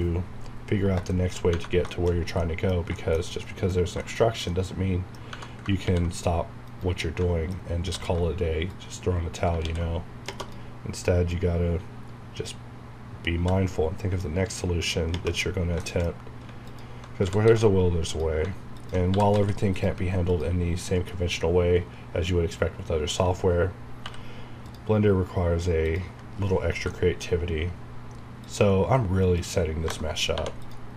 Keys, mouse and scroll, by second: 1.1 shift+middle click, 1.4 scroll up 1, 1.8 scroll down 1, 1.9 shift+middle click, 2.1 shift+scroll up 2, 2.4 middle click, 3.8 scroll down 1, 4.0 shift+middle click, 5.3 Tab, 5.8 ctrl+r, 6.7 right click, 7.0 middle click, 7.9 alt+w, 8.7 click, 9.6 ctrl+x, 11.3-13.4 drag, 13.4 g, 15.8 shift+middle click, 16.4 scroll up 1, 16.6 alt+click, 17.0-19.8 typing, 18.1 click, 20.9 middle click, 21.1 scroll up 1, 24.0 k, 24.6 click, 26.5 scroll down 1, 26.9 shift+middle click, 28.4 click, 29.8 KP_Enter, 30.3 2, 30.6 click.